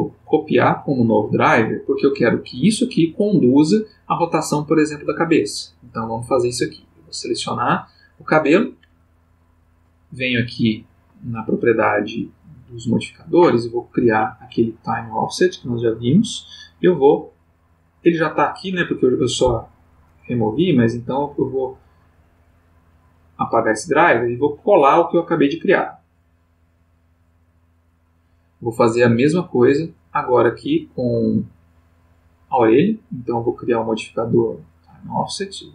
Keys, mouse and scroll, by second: 1.6 click, 6.9 click, 10.0 click, 13.7 click, 15.9 click, 20.6 right click, 23.5 click, 24.4 right click, 26.2 click, 31.5 click, 33.5 click, 34.8 click.